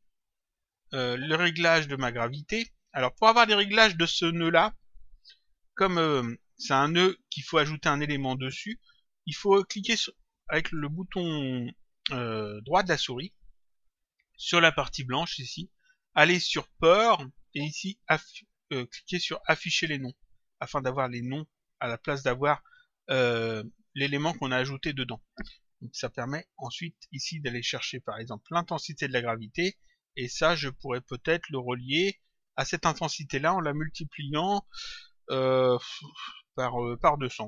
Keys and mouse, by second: 0.3 click, 2.0 click, 15.3 right click, 20.1 click, 26.7 click, 28.5 click, 30.2 click, 35.5 click.